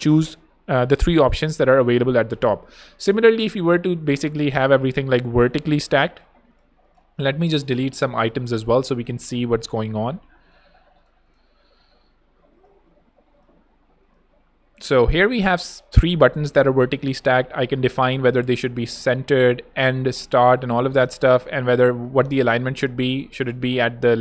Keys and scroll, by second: 9.0 BackSpace, 12.0 BackSpace.